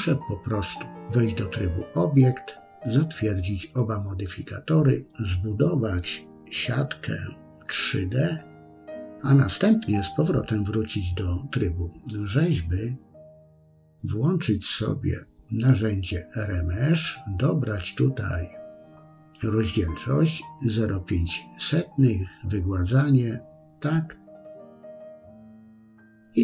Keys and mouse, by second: 4.3 click, 9.5 Tab, 15.6-24.9 drag.